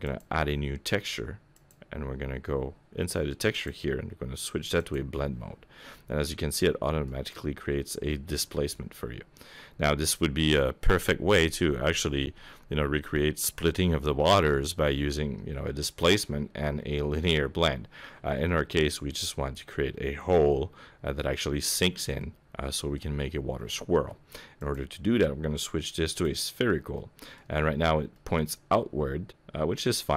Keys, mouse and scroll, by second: 0.0 click, 1.5 click, 3.5 click, 5.9 middle click, 7.1-8.1 scroll down 6, 8.1 middle click, 18.4 middle click, 22.1 middle click, 23.1-24.6 scroll up 1, 24.6 click, 24.6-25.2 scroll up 1, 26.9 middle click, 27.5-28.1 scroll up 6, 28.1 middle click, 29.9-30.1 scroll up 1.